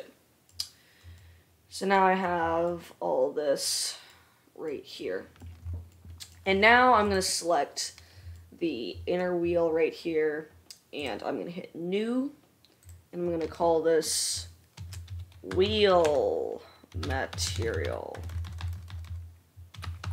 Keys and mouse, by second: 2.5-6.0 middle drag, 7.6-12.3 drag, 15.8 e, 18.5 BackSpace, 18.6 BackSpace, 18.9 BackSpace.